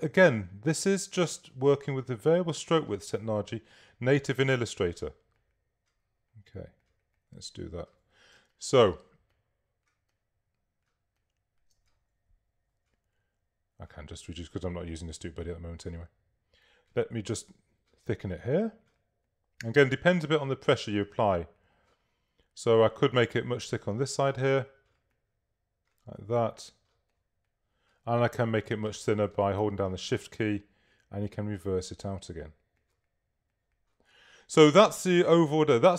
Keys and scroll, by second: 8.6 shift+space.